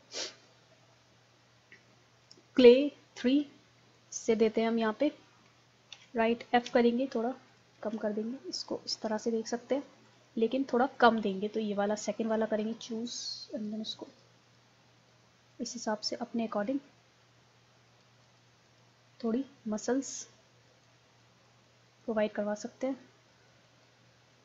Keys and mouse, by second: 2.2-6.7 drag, 5.9 ctrl+z, 6.7 f, 7.6 click, 7.8 ctrl+z, 8.9 ctrl+z, 12.4-24.0 drag, 24.0-24.4 middle drag.